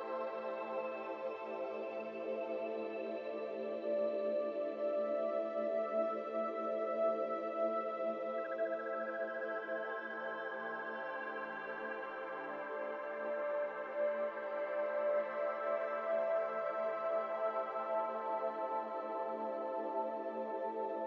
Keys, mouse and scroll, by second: 1.6 click, 2.5 shift+click, 3.3 shift+click, 4.3 shift+click, 6.0 shift+click, 8.8 shift+click, 10.9 shift+click, 12.5 shift+click, 13.8 scroll down 2, 13.8 middle click, 14.2 alt+z, 14.3 middle click, 14.5-16.0 scroll up 2, 16.0 KP_7, 16.6 alt+z, 16.8 s.